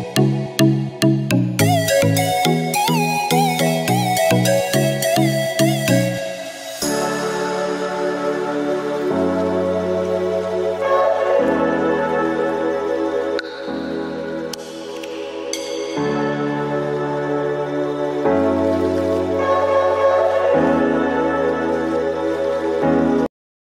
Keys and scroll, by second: 3.0 space, 4.1 space, 6.9 space, 9.0 space, 10.1 space, 16.0 ctrl+Return, 17.2 ctrl+j, 20.9 space.